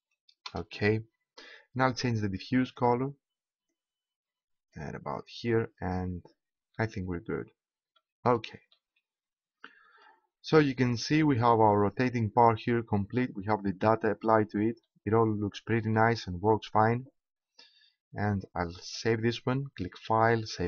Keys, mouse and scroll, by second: 2.7-4.3 drag, 4.3 middle click, 6.7-13.1 middle drag, 14.8 middle click, 18.8 click.